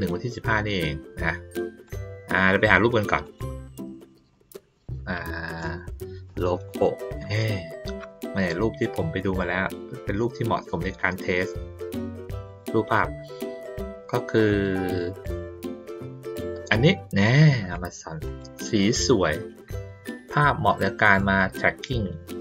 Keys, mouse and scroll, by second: 1.8 click, 3.2 click, 4.7 click, 10.4 middle click, 11.2 middle click, 12.4 click, 13.6 middle click, 14.8 middle click, 18.2 click.